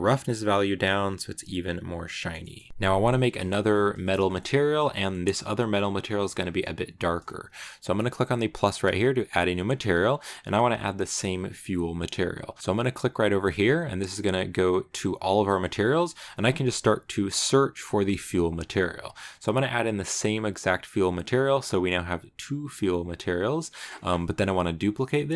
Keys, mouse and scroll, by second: 0.1-2.0 drag, 2.0 shift+middle click, 2.4 shift+scroll down 1, 2.5-4.8 shift+middle drag, 4.1 shift+scroll up 1, 4.8 scroll up 1, 4.8 shift+middle click, 5.5-8.2 scroll up 6, 8.2-8.9 scroll up 3, 9.0-12.0 drag, 14.3-17.5 drag.